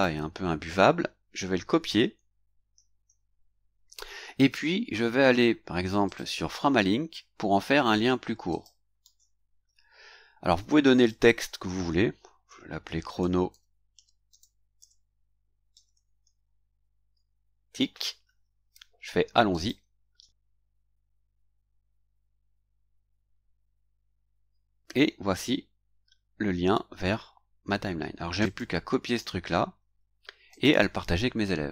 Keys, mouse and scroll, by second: 2.7 ctrl+c, 6.0 click, 8.5 click, 9.0 ctrl+v, 10.9 click, 12.2-16.7 typing, 19.5 click, 23.4-23.9 scroll down 1, 24.7 scroll down 1, 28.4 click, 29.0 right click, 30.5 click.